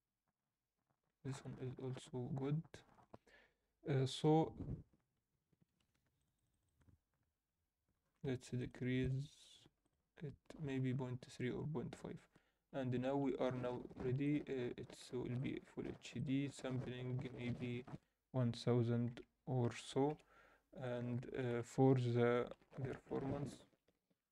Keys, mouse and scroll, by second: 0.0-1.8 drag, 6.1 click, 13.2 ctrl+s, 14.3-16.0 drag, 19.8 click, 19.8 0, 20.8-23.8 drag, 22.6 0.